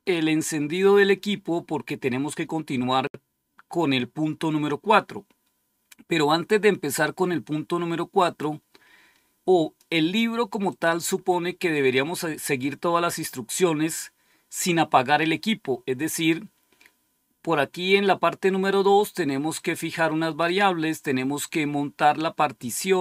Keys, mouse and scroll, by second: 8.1-9.7 drag, 10.5 click, 11.6-12.3 scroll up 2, 13.3-13.9 scroll down 2, 13.9-14.8 scroll down 1, 14.8-15.6 scroll down 1, 15.6-17.9 scroll down 1, 19.4 click, 21.8 click.